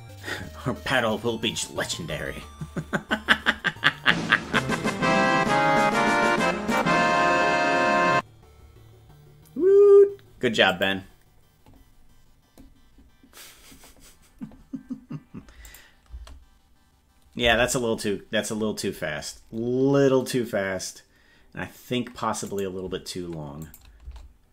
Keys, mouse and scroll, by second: 15.7 click, 16.1 space, 17.6 space, 22.5 right click, 23.7 click, 24.1 space.